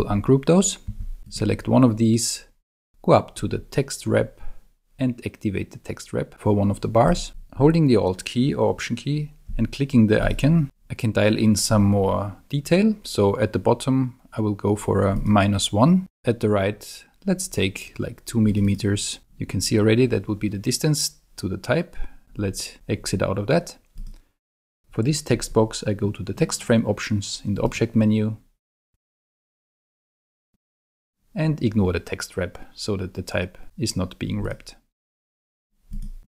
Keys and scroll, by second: 0.9 shift+super+g.